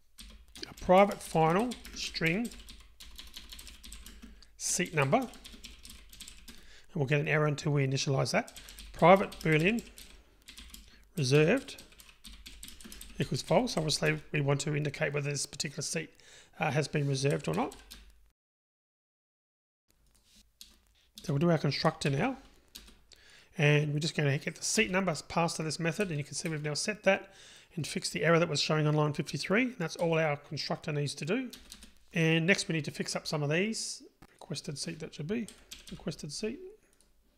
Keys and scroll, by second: 22.1 super+n, 25.3 super+n.